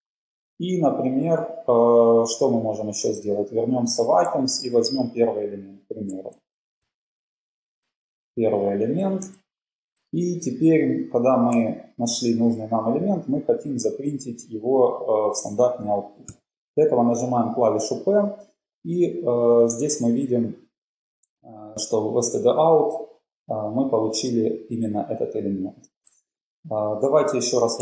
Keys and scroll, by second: 4.2-6.3 typing, 6.4 Left, 7.8-9.4 typing, 27.0 Up.